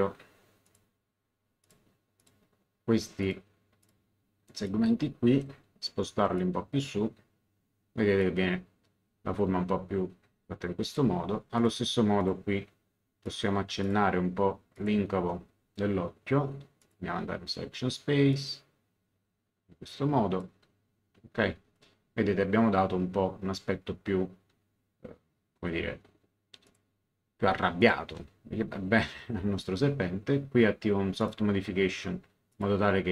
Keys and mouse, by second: 1.6 click, 6.3 click, 10.8 click, 11.5 ctrl+click, 13.2 ctrl+click, 16.8 click, 18.3 click, 26.6 click, 27.8 ctrl+click, 31.2 click, 32.5 click.